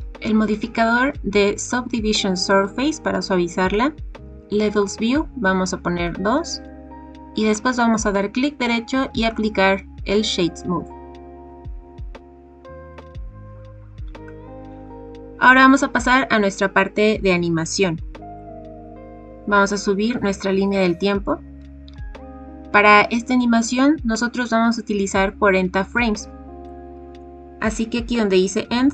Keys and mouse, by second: 6.0 click, 7.7 right click, 18.5-20.7 drag, 26.6-28.9 drag.